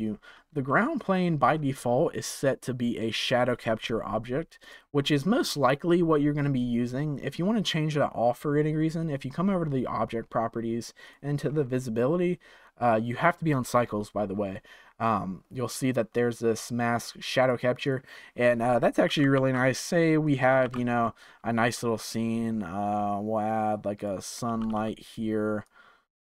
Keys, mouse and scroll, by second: 4.6 click, 11.0-11.4 drag, 11.4 scroll down 3, 17.4 click, 17.8 click, 19.0 g, 20.6 shift+a, 24.5 g, 25.6 click.